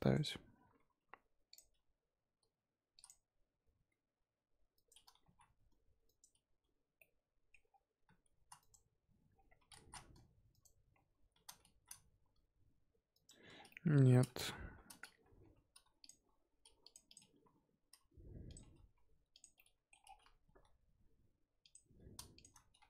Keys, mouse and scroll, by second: 1.7 r, 3.9 s, 5.1 s, 6.9-7.6 middle drag, 7.6-8.0 scroll down 2, 8.0 shift+s, 8.6 right click, 9.3-9.6 scroll down 3, 9.6 s, 10.9-11.3 scroll up 3, 11.3 s, 13.5 scroll down 4, 13.7 middle drag, 14.0-14.4 scroll up 3, 14.4 KP_1, 14.7-15.4 scroll up 3, 15.4 r, 16.2 g, 17.0 click, 17.3 r, 18.5 g, 19.6-20.0 middle drag, 20.0-20.4 scroll down 4, 20.4 g, 22.3 shift+click, 22.7-22.8 scroll up 2.